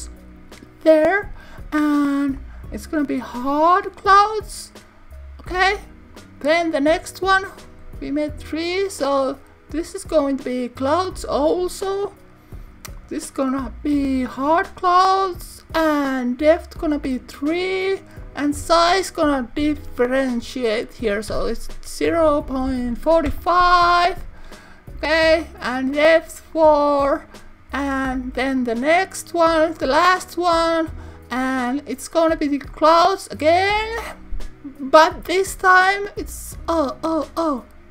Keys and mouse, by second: 2.4-3.7 drag, 6.3-7.8 drag, 10.4-11.4 drag, 13.0-14.7 drag, 17.0 click, 18.2-24.6 drag, 26.6 click, 28.7-29.9 drag, 31.9-33.0 drag.